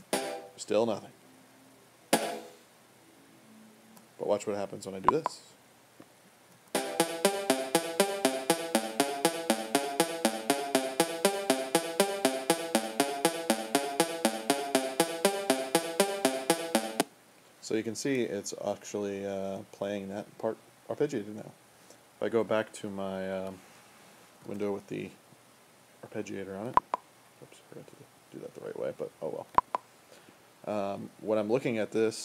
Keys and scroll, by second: 6.0 space, 6.6 space, 16.8 space, 24.4 super+8.